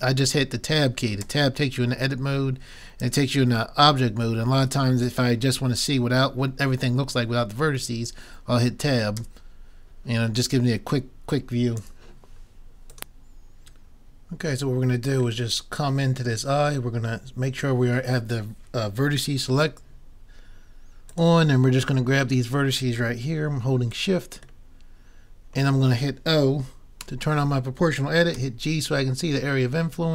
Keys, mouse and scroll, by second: 1.3 Tab, 3.1 Tab, 4.6 Tab, 9.2 Tab, 11.8 Tab, 14.7-17.2 middle drag, 17.2 middle click, 21.1-22.9 drag, 23.9-25.6 drag, 24.7-26.4 middle drag, 27.1 o, 28.3 g.